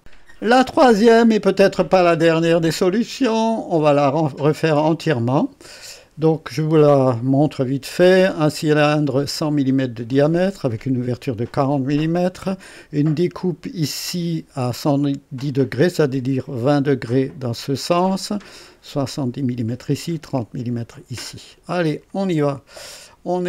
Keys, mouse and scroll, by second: 5.2 click, 7.0 click, 21.9 click.